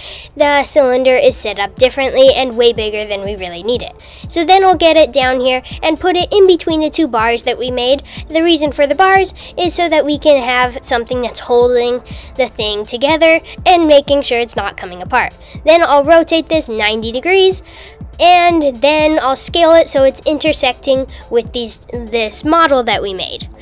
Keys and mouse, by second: 1.1 s, 4.4 g, 9.0 s, 11.2 r, 17.4 s.